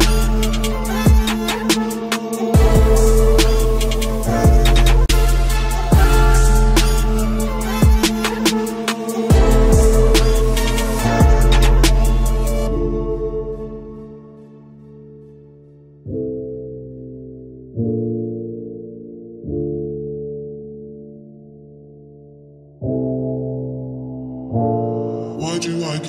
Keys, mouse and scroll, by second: 1.8 c, 5.1 c, 17.4 click, 17.9 middle click, 18.5 click, 19.5 c.